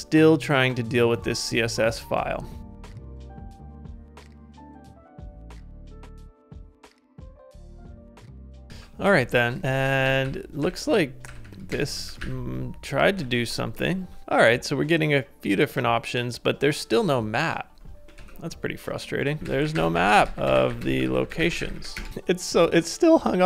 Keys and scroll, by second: 8.7 super+Tab, 9.6 ctrl+a, 9.9 ctrl+a, 10.3 ctrl+u, 10.6 ctrl+u, 12.1 ctrl+a, 13.2 super+Tab, 13.7 super+Tab, 18.1 super+Tab, 19.4-21.3 typing.